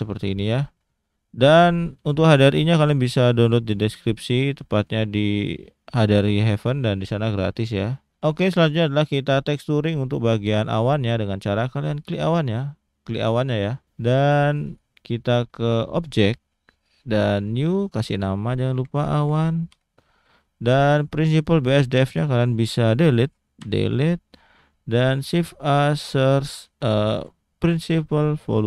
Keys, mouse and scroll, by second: 12.3 click, 14.6 click, 17.4 click, 18.1 click, 20.9 click, 21.3 click, 23.6 Delete.